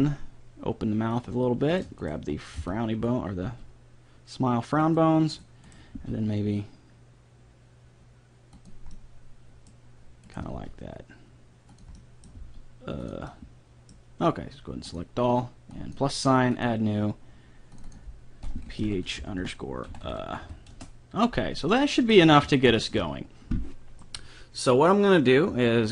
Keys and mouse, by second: 1.7-4.0 right drag, 2.6 b, 3.4 g, 5.3-7.4 right drag, 6.0 g, 8.9 middle click, 10.3 right click, 10.5 g, 11.3 right click, 12.4 g, 14.9-17.4 drag, 19.6 click, 21.8 middle click, 22.3 a, 22.7-25.4 middle drag.